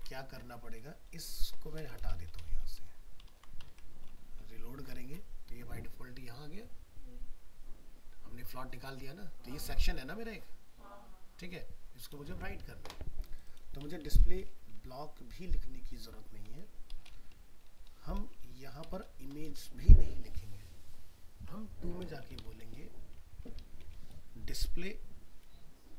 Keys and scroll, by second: 3.3 ctrl+s, 3.7 alt+Tab, 12.3 alt+Tab.